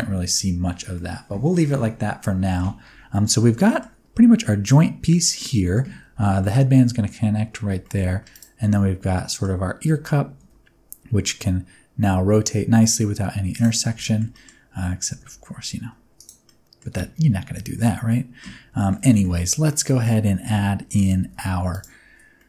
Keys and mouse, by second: 0.9-2.6 middle drag, 3.1-3.8 middle drag, 5.2-5.7 middle drag, 6.2 shift+middle click, 7.8 shift+middle click, 8.3 click, 8.6 middle click, 9.9 r, 10.4 y, 13.5 click, 14.0 shift+middle drag, 14.3 middle click, 15.1 r, 15.3 y, 16.1 click, 16.4 middle click, 18.1 middle click, 18.7 middle click, 19.1 shift+middle click, 19.7-20.0 middle drag, 20.4 Tab, 21.2 3, 21.7 alt+click, 22.3 middle click.